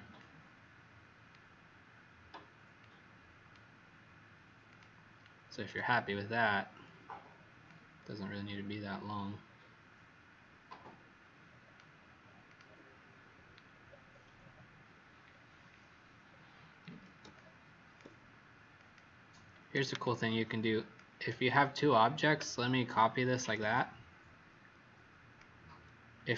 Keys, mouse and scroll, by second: 13.8-14.3 alt+scroll down 2, 14.6-15.3 alt+scroll down 1, 15.4-16.2 alt+scroll down 1, 16.4 alt+scroll down 1, 17.3 click, 20.0 shift+click, 23.4 alt+click, 26.2 click.